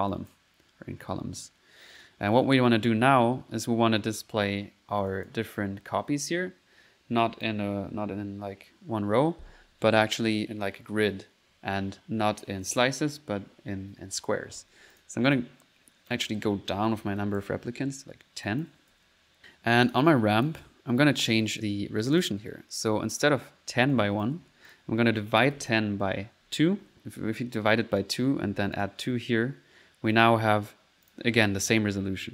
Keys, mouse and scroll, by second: 0.1 click, 1.0 middle click, 2.4 click, 5.1 click, 7.2 click, 15.0 click, 16.1 click, 16.5-17.3 typing, 18.5 click, 19.0 ctrl+s, 19.3 ctrl+middle click, 19.9 ctrl+click, 20.4 click, 21.3 click, 22.2 click, 24.0 click, 24.7 click, 28.0 click, 30.2 middle click, 31.1 click.